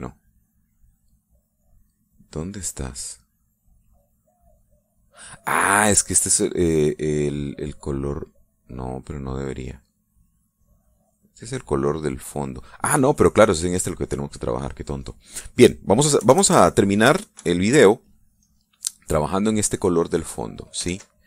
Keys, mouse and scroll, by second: 0.3 click, 1.6 click, 2.0 click, 3.5 click, 4.0 click, 5.0 click, 5.6 click, 6.0 click, 6.4 click, 9.4 click, 9.8 click, 10.6 click, 11.0 click, 11.4 click, 11.8 click, 13.9 click, 15.4 middle click, 16.4 click, 17.1 KP_Add, 17.6 middle click, 18.3 KP_Subtract, 19.0 middle click, 20.6 click.